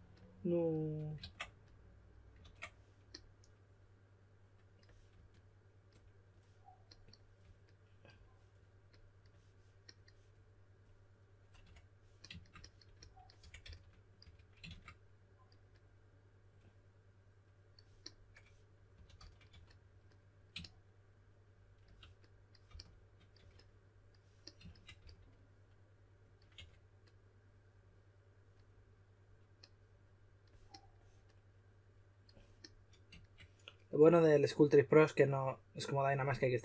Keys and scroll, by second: 2.4 super+z, 11.6 2, 13.6-14.2 typing, 18.7-20.0 typing, 22.6-23.8 typing, 25.0 shift+s, 26.3-27.0 typing.